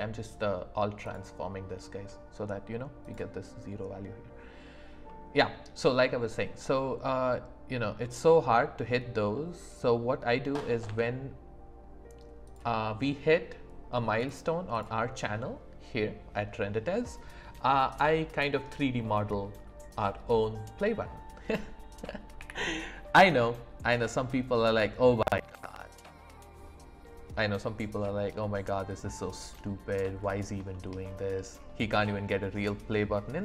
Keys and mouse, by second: 3.1 click, 5.1-5.7 middle drag, 6.7 middle click, 8.0 middle click, 9.4 middle click, 10.9 Tab, 14.2 click, 14.8 click, 22.4 i, 28.8 click, 29.5 middle click, 30.7 shift+middle click, 31.9 middle click.